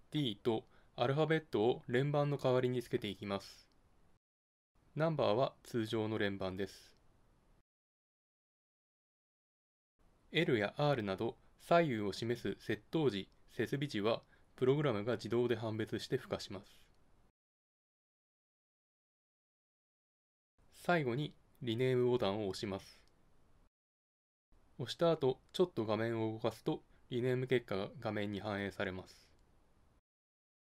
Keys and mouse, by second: 11.1-23.2 drag, 29.9-30.7 drag.